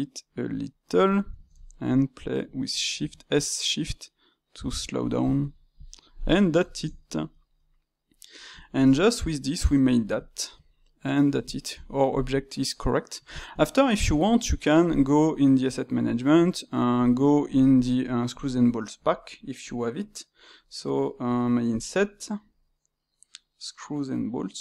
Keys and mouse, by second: 1.3 space, 6.0-7.1 ctrl+middle drag, 7.3-15.6 middle drag, 15.6-17.0 drag, 18.5-21.5 middle drag, 21.7-22.0 drag, 22.0-24.6 middle drag.